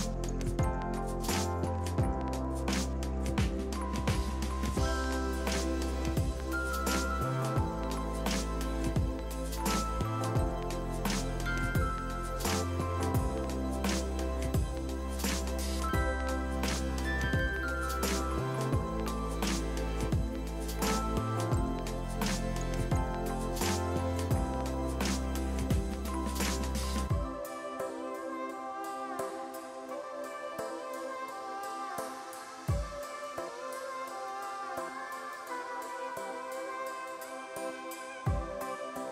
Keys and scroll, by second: 1.0-2.5 typing, 17.5 5, 17.8 0.